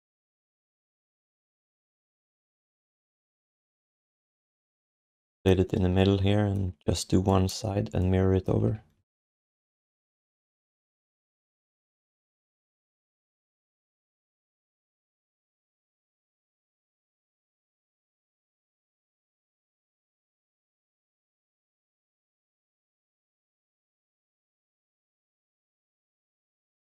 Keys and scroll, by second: 8.6 q, 26.3 q.